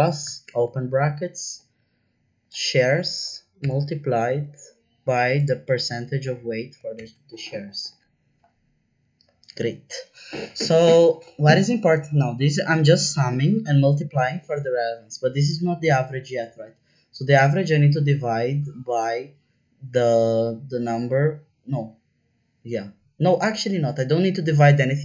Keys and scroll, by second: 0.4 shift+9, 3.6 shift+8, 6.9 shift+0.